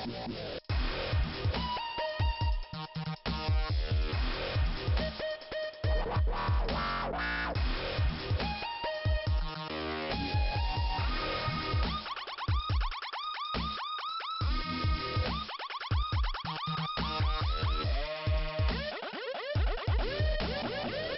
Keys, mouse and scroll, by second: 1.4 click, 1.6 click, 1.8 click, 2.2 click, 3.0 double click, 3.4 scroll down 2, 4.7 middle click, 6.0-6.9 scroll up 4, 6.5 middle click, 6.6 middle click, 8.2 scroll up 1, 10.0 click, 11.8 click, 14.0 click, 14.2 right click, 14.3 double right click, 14.9 click, 16.7 click, 18.7 click.